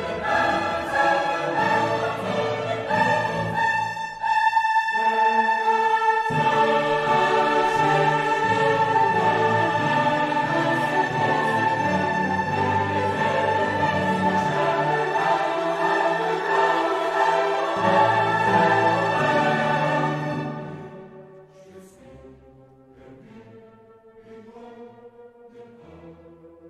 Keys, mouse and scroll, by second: 0.0 click, 1.4 click, 2.7 click, 3.7 click, 4.8 middle click, 5.7 click, 6.5 click, 7.4 click, 8.7-9.1 scroll down 2, 10.5 click, 12.3 click, 14.2 scroll up 2, 14.9-15.5 scroll down 2, 15.6-16.3 scroll up 2, 16.6-17.3 scroll up 2, 17.6-18.3 scroll up 2, 18.4-18.9 scroll up 2, 19.1-19.6 scroll up 2, 19.9-20.4 scroll up 2, 20.5-21.0 scroll down 2, 21.2-21.6 scroll down 2, 21.8-22.2 scroll down 2, 22.3-23.2 scroll down 4, 23.3 scroll down 2, 24.3 click, 25.2 click.